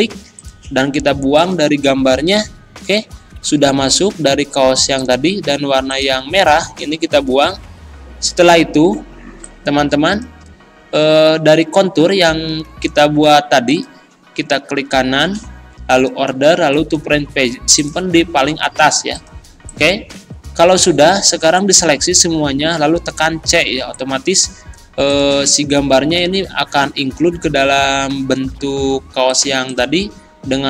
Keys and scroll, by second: 2.4 Delete, 6.8 Delete, 23.3 c, 25.4 z.